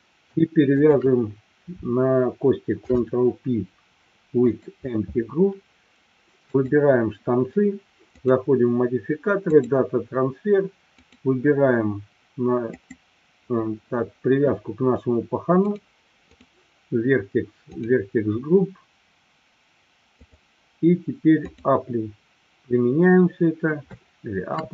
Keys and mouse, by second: 0.7 shift+click, 2.7 ctrl+p, 8.1-9.8 drag, 10.9 click, 20.3-22.7 drag, 23.8-24.6 shift+middle drag.